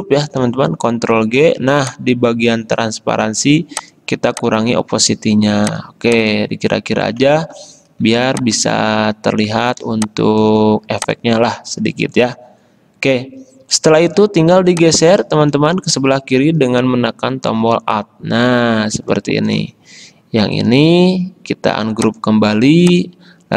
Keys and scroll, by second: 1.1 ctrl+g, 8.3 space, 10.0 space.